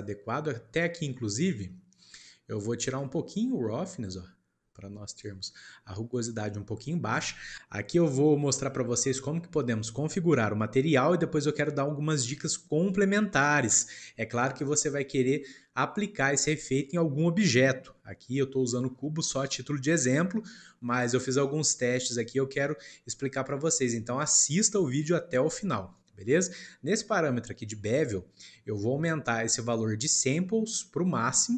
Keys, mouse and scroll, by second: 0.6-1.1 scroll up 2, 1.1 scroll down 1, 1.3-2.9 middle drag, 2.9-5.9 drag, 14.8-17.8 shift+middle drag, 18.4-21.4 shift+middle drag, 22.6-25.6 shift+middle drag, 25.9-29.0 shift+middle drag, 31.1-31.5 drag.